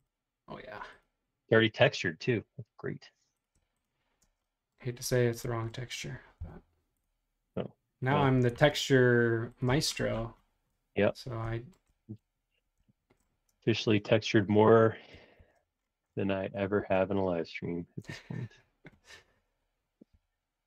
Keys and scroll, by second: 4.2 space, 6.4 l, 7.3 |, 9.6 space, 13.5 space, 15.3 shift+g, 20.2 r.